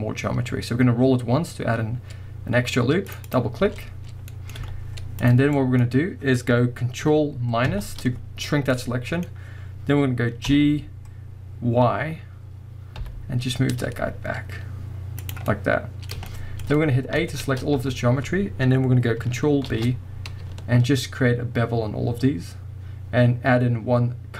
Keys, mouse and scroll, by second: 3.3-4.3 drag, 4.3-13.4 middle drag, 4.6 z, 5.8-7.6 scroll up 1, 7.6 ctrl+KP_Subtract, 10.5 g, 15.3 middle click, 15.3 click, 16.3 shift+middle click, 16.8 middle click, 17.3 a, 19.7 ctrl+b.